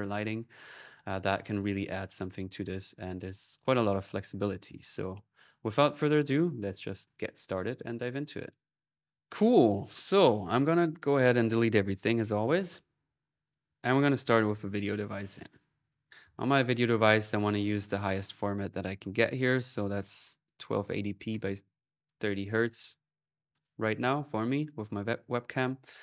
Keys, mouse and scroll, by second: 2.3-4.1 drag, 4.5 typing, 8.7 click, 10.3 click, 10.9-12.0 right drag, 13.0-16.5 typing, 13.2 ctrl+click, 13.6 click, 15.3 click, 15.9-17.0 middle drag, 17.2 click, 21.1 click, 22.6-24.1 middle drag, 24.4-26.0 drag, 24.7 typing.